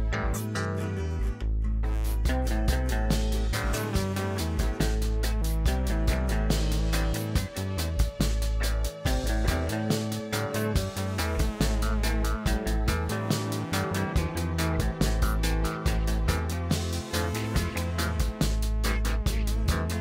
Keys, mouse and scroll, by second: 1.0 scroll up 2, 1.3-3.8 middle drag, 4.3-4.9 scroll up 1, 5.3 click, 6.6 3, 7.2 click, 10.3-12.9 drag, 16.5-17.5 middle drag, 18.0 shift+click, 19.0 alt+shift+click, 19.9-20.0 middle drag.